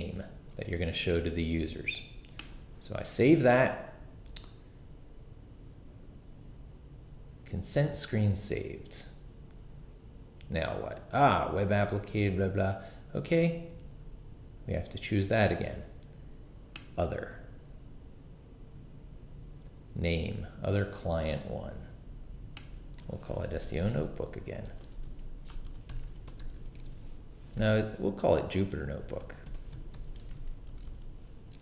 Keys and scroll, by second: 23.2-27.5 typing, 29.2-31.6 typing.